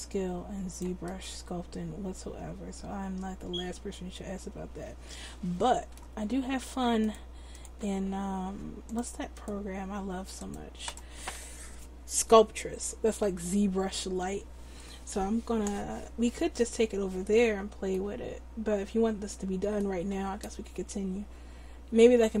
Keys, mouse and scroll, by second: 1.0-2.8 middle drag, 7.8-9.0 drag, 9.5 click, 10.8-18.0 drag.